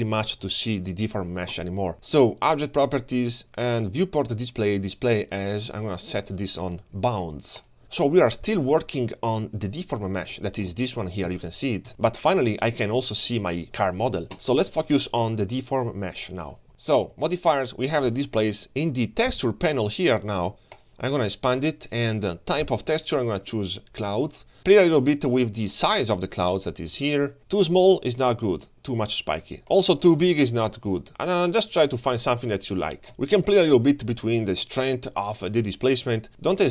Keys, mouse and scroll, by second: 0.5 g, 2.4 click, 3.0-3.6 scroll down 3, 5.2 scroll down 1, 5.4-7.8 drag, 11.3 Tab, 11.9 Tab, 12.6 g, 14.7 g, 17.0 click, 20.8 click, 23.1 click, 23.5-24.4 drag, 26.6-30.4 shift+drag, 30.6 shift+click, 31.0-33.1 shift+drag, 33.1 middle click, 33.1-33.7 scroll down 2, 35.0 click, 36.6 shift+click.